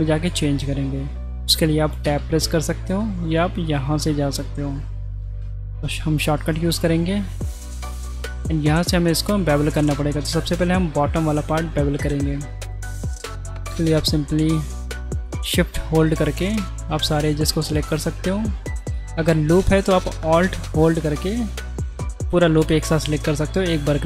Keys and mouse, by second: 0.4 middle click, 2.4 Tab, 3.0 Tab, 3.8-4.9 drag, 5.4 Tab, 6.5-7.0 shift+middle drag, 7.5 middle click, 8.2 2, 8.7 middle click, 12.6 middle click, 13.2 click, 14.3 shift+click, 15.3 shift+click, 16.4 shift+click, 17.2-19.2 middle drag, 21.7 middle click.